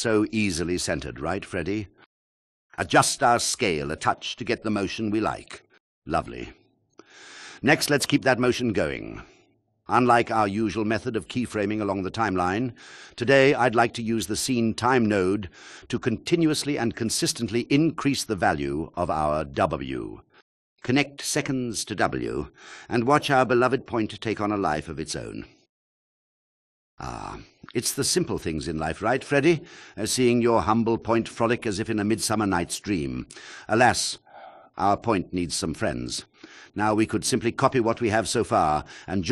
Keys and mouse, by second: 0.4 click, 0.8 click, 1.2 click, 1.5 click, 1.6 click, 2.2 click, 2.6-4.7 drag, 6.1-8.4 drag, 14.3 shift+a, 18.7 click, 24.7 click, 37.4 click, 38.8 shift+click.